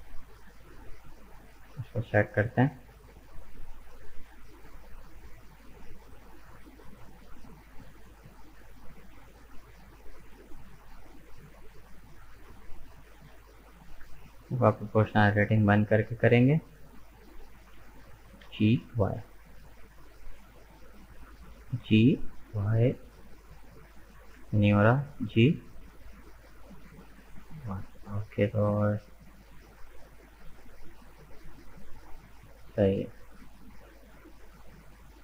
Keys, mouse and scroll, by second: 0.2-3.4 shift+middle drag, 3.4 shift+right click, 4.0 shift+right click, 4.6 shift+right click, 5.4 shift+right click, 5.8-8.5 shift+middle drag, 8.5-9.0 scroll up 2, 9.0-12.0 shift+middle drag, 12.0 shift+right click, 13.1-13.5 scroll down 2, 13.5-15.0 middle drag, 15.0 click, 15.7 middle click, 16.5-17.2 scroll up 1, 17.2-18.4 middle drag, 18.4 g, 21.5 g, 25.0 g.